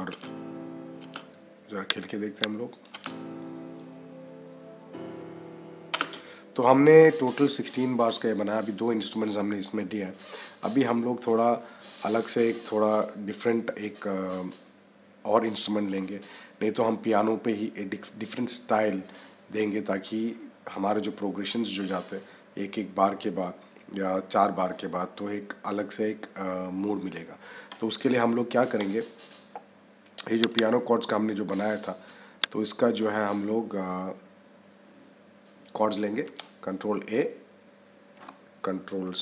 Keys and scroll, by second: 0.0 -, 2.8 -, 36.2 ctrl+a, 39.1 ctrl+c.